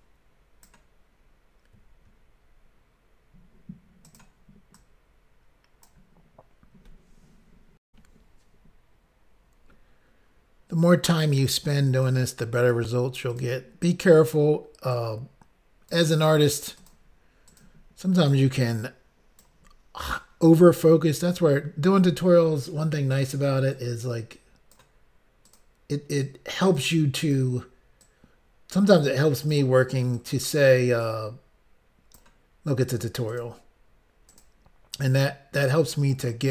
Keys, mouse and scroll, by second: 4.1 click, 4.2 click, 4.8 click, 7.9 Pause, 11.3 click, 11.4 click, 12.0 click, 13.3 click, 13.4 click, 14.1 click, 14.3 click, 14.9 click, 16.7 click, 16.8 click, 17.4 click, 17.6 click, 18.2 click, 18.3 click, 18.7 click, 20.0 click, 20.1 click, 23.1 click, 23.2 click, 23.7 click, 25.4 click, 25.5 click, 26.2 click, 27.2 click, 27.3 click, 28.0 click, 29.4 click, 29.5 click, 30.1 click, 30.3 click, 31.0 click, 33.3 click, 33.4 click, 34.3 click, 34.4 click, 34.9 click.